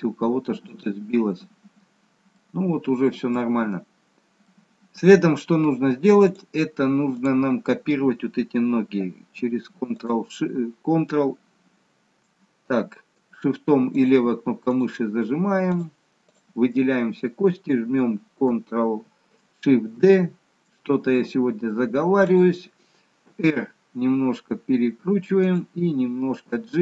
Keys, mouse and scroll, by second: 1.6-2.4 scroll up 2, 2.4 middle click, 2.4-3.2 scroll up 3, 3.6-4.1 scroll down 2, 4.4 middle click, 4.4-5.1 scroll down 1, 6.2 click, 7.0 click, 10.0 shift+click, 11.2 shift+click, 13.9 shift+click, 20.0 shift+d, 23.3 r, 26.6 g.